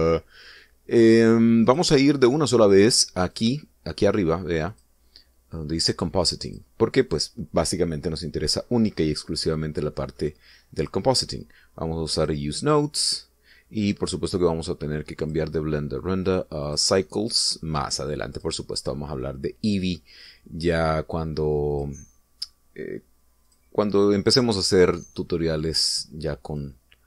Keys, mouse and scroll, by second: 2.6 click, 4.3 click, 5.6 click, 7.4 click, 11.7 click, 13.1 click, 16.2 click, 17.6 click, 19.3 click, 22.7 click, 24.4 click.